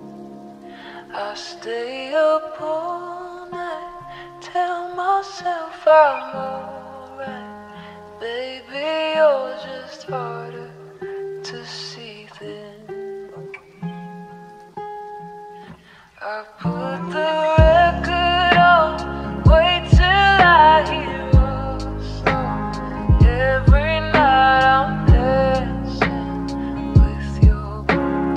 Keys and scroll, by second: 3.4 p.